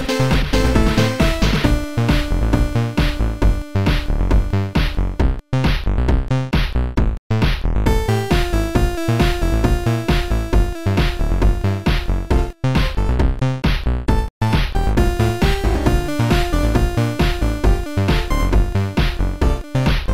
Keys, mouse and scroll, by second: 0.2 click, 0.4 click, 1.2 click, 2.3 click, 4.6 Delete, 4.6 click, 6.9 Delete, 6.9 click, 7.7 Delete, 8.1 click, 9.1 click, 9.8 click, 11.0 click, 11.6 click, 13.6 click, 14.9 click, 17.9 click, 20.0 click.